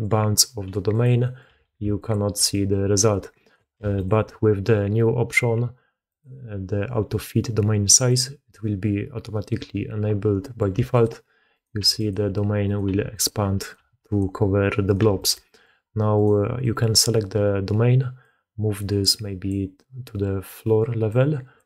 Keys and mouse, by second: 0.5-3.6 typing, 1.1 click, 2.4 click, 3.0-3.4 drag, 6.0-9.9 drag, 10.3 click, 10.6 g, 11.4 click, 11.7 g, 12.5 click, 13.5 click, 13.7 g, 14.7 click, 15.3 g, 15.3 drag, 16.0 click, 16.5 drag, 18.1-19.4 drag, 19.6-20.4 drag, 21.0 click.